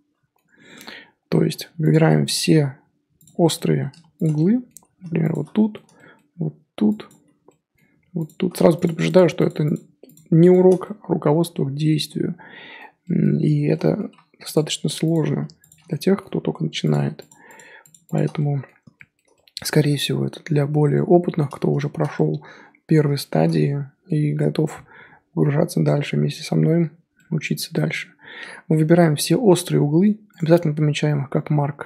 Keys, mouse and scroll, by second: 0.7 Tab, 1.9 click, 2.0-3.2 middle drag, 3.2 alt+click, 3.4 middle click, 3.6-4.3 scroll up 1, 4.3 middle click, 5.3 alt+shift+click, 5.5-7.1 middle drag, 7.1 alt+shift+click, 7.4 middle click, 8.2 alt+shift+click, 9.0 shift+click, 9.3 shift+click, 9.6 shift+click, 10.5 shift+click, 10.8-14.5 middle drag, 14.5 alt+shift+click, 15.1 alt+shift+click, 15.7 alt+shift+click, 15.8-16.9 middle drag, 16.9 alt+shift+click, 17.4 shift+click, 17.8 shift+click, 18.0 shift+click, 18.3-20.4 middle drag, 20.4-20.9 scroll down 2, 20.9-30.3 middle drag, 30.3-31.8 right drag.